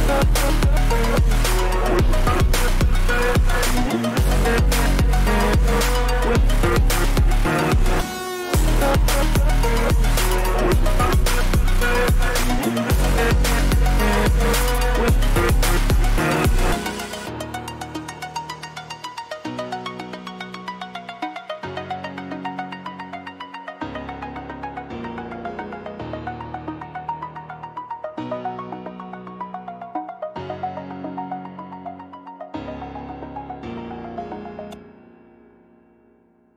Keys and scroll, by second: 1.3 ctrl+shift+a, 3.4 ctrl+shift+a, 25.8 ctrl+=, 27.0 ctrl+-.